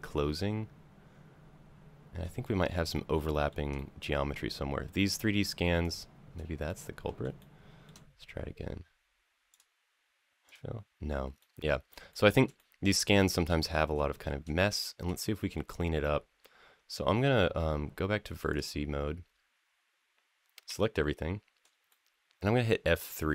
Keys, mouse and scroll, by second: 2.2 shift+middle click, 2.7 shift+middle click, 3.1 shift+middle click, 3.5-4.9 middle drag, 5.6 shift+click, 6.5 middle click, 7.2 shift+middle click, 7.9 scroll down 1, 9.3-10.4 drag, 11.2 middle click, 11.9 shift+middle click, 12.3-13.5 middle drag, 13.9 shift+middle drag, 14.2-14.9 scroll down 3, 15.0 shift+middle click, 15.8-16.7 middle drag, 18.3 click, 20.5 a, 21.7 shift+middle click, 22.3 F3, 22.3 click, 22.3 a.